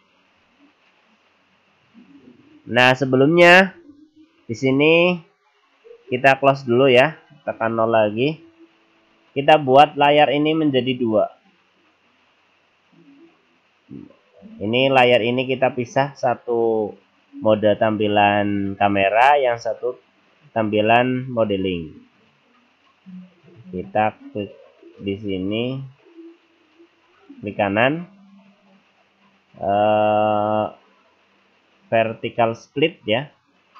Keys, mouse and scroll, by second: 5.8-6.4 scroll up 1, 6.4-7.9 scroll up 1, 7.9 KP_0, 9.1 scroll down 1, 22.4 click, 27.2 right click.